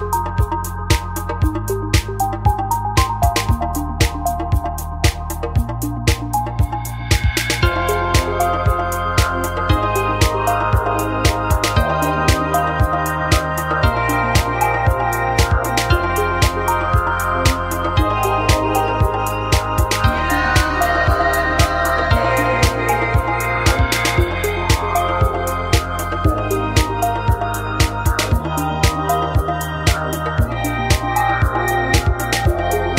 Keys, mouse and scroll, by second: 0.5 n, 1.1 click, 1.2 n, 2.5-4.2 drag, 3.1 s, 4.3 click, 4.9 right click, 5.5 click, 5.5 right click, 6.4 a, 9.5-10.6 middle drag, 17.8 a, 18.1 a, 19.4-21.7 right drag, 23.3 shift+d, 24.1 click, 24.5 s, 26.7 click, 27.6 n, 28.2 click, 28.3 n.